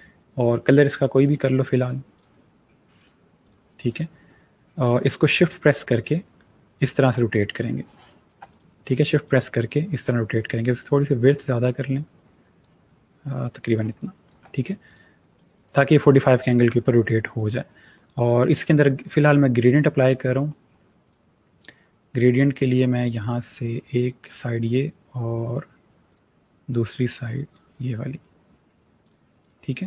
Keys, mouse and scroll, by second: 1.1 click, 7.6 space, 7.7 click, 8.1 space, 8.3 click, 13.7 space, 13.8 click, 17.2 click, 19.7 click.